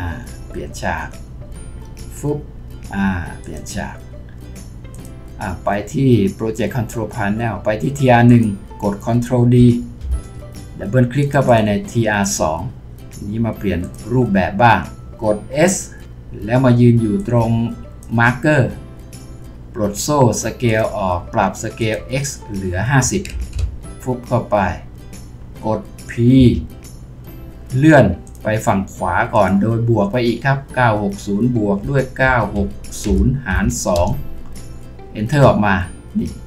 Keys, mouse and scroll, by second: 10.0 ctrl+d, 11.5 double click, 16.0 typing, 22.8-23.5 typing, 23.6 Return, 26.4 typing, 31.6-34.0 typing, 35.3 Return.